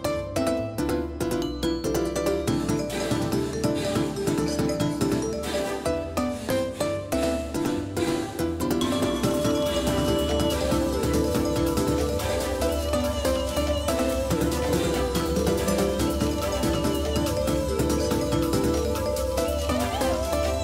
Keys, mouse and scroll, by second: 0.1 KP_3, 2.8-6.2 drag, 10.4-14.2 drag.